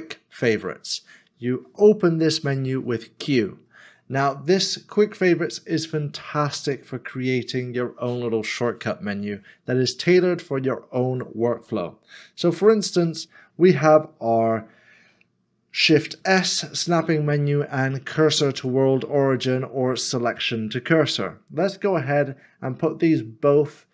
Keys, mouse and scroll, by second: 16.1 shift+s.